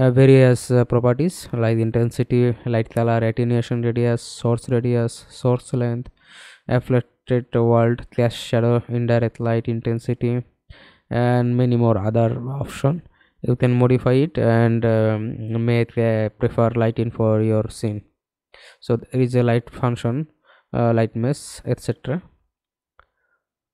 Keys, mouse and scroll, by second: 2.5-4.1 scroll down 10, 4.1-5.9 scroll down 2, 5.9-6.5 scroll down 1, 6.5-8.1 scroll down 1, 8.1-9.2 scroll down 1, 9.2-9.9 scroll down 1, 9.9-10.9 scroll down 1, 10.9-11.3 scroll down 1, 12.5-13.1 scroll down 1, 13.1-15.9 scroll down 4, 15.9 scroll down 2, 16.9-17.6 scroll down 1, 17.6-18.3 scroll down 2, 18.3-19.1 scroll down 3, 19.1-19.8 scroll down 2, 19.9-20.4 scroll up 5.